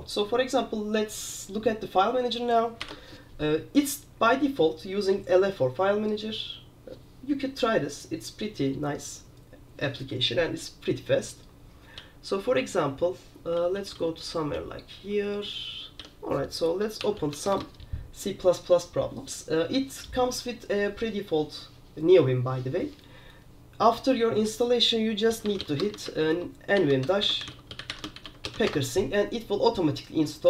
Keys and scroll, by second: 2.9 super+r, 12.1 typing, 13.2-18.5 typing, 25.2-29.2 typing.